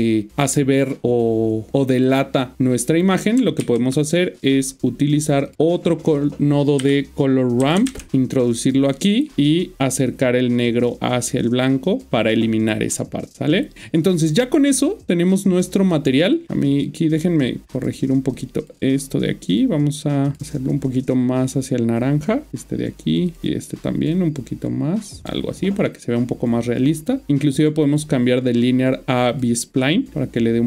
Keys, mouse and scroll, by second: 3.6 shift+a, 5.4 click, 6.7-7.8 typing, 8.1 Return, 8.6 click, 16.6-22.1 click, 23.3 click, 23.4 click, 27.9 click.